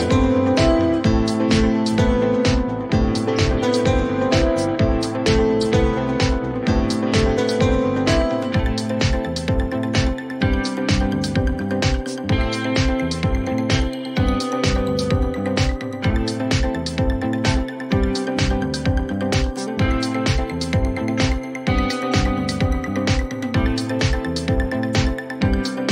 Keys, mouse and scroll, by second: 11.0-12.3 typing.